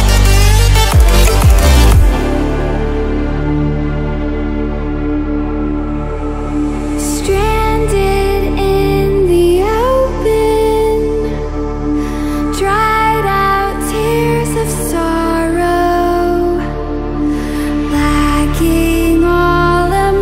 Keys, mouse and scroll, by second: 3.4-12.2 drag, 17.9 space, 18.1-20.0 click, 18.5 space, 19.1 click, 19.3 space.